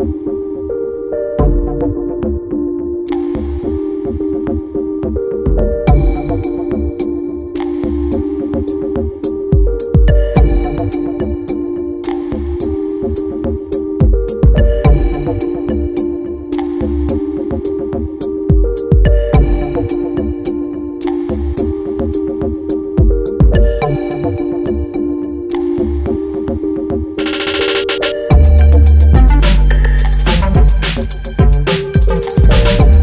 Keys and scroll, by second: 20.1 b, 20.5 i, 22.7 BackSpace, 24.4-27.3 typing.